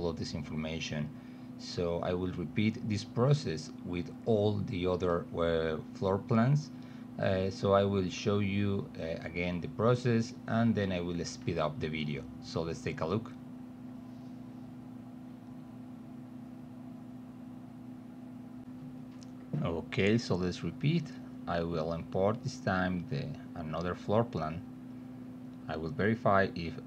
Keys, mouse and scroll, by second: 3.9 click, 4.6 click, 5.5 click, 5.9 click, 7.3 drag, 9.9 click, 12.0 click, 13.3 click, 13.8 click, 13.9 click, 15.6 click, 16.4 click, 17.0 click, 18.6 click, 19.9 click, 22.5 click, 26.0 click.